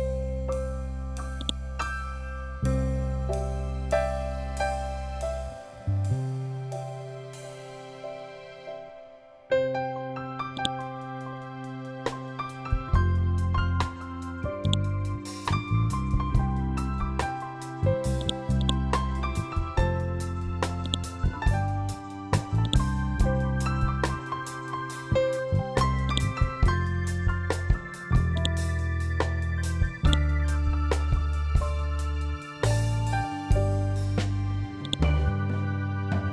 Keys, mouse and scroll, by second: 0.9-10.0 drag, 10.0 right click, 14.1-17.2 drag, 17.7-22.1 drag, 22.4 scroll down 1, 25.1 scroll up 1, 25.5 click, 26.4 scroll up 1, 27.8 click, 29.5-31.5 ctrl+drag, 31.5 scroll down 1, 34.3-36.0 ctrl+drag, 36.0 scroll down 1.